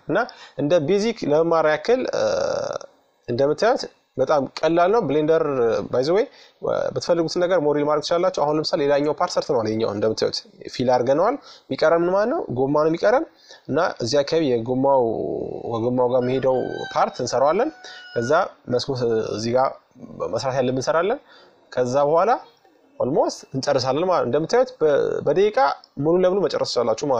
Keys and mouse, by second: 1.4-3.1 drag, 3.9-5.7 drag, 5.7-7.8 middle drag, 10.8-13.1 middle drag, 18.2-20.0 drag, 20.4-22.2 middle drag.